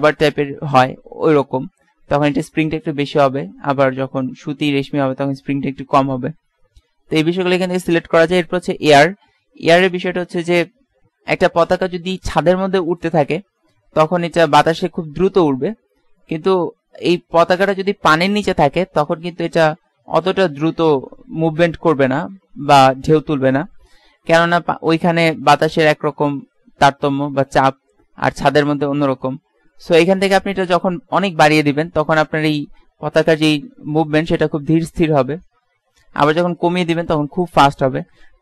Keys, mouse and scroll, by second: 32.5 click.